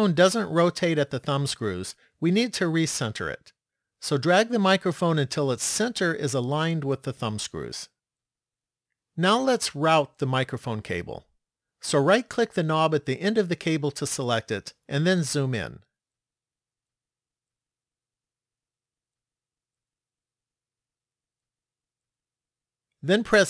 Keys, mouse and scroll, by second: 4.9 click, 12.2 right click, 15.0-16.9 scroll up 6, 16.9-17.7 scroll up 1, 17.7 shift+middle click, 21.2 middle click.